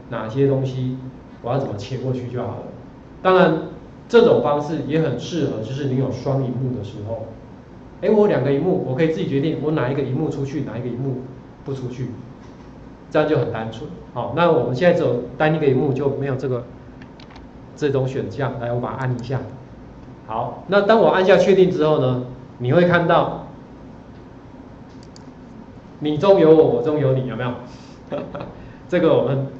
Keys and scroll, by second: 17.2 ctrl+4.